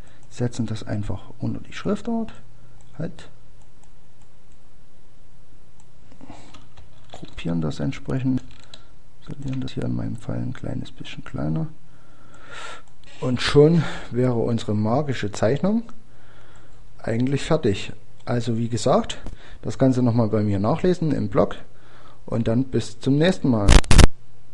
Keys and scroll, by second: 17.6 End, 20.8 Page_Up.